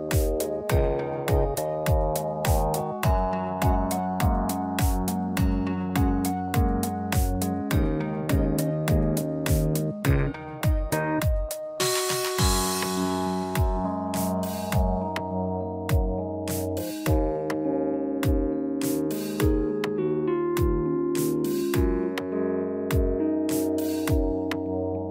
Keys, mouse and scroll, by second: 2.4 shift+middle click, 2.9 middle click, 3.4 scroll up 3, 3.8 middle click, 4.2 middle click, 5.7-6.2 scroll down 3, 6.2 middle click, 6.7 scroll down 1, 7.1 middle click, 7.6 click, 9.4-9.9 scroll up 6, 10.0 shift+middle click, 10.4 middle click, 12.8 click, 17.5 click, 23.5 scroll down 1, 24.3 click.